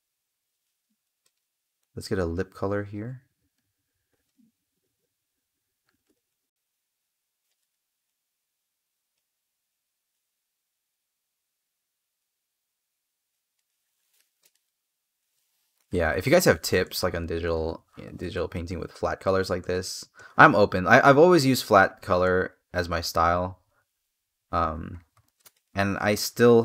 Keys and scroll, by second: 13.9 space, 16.2 space.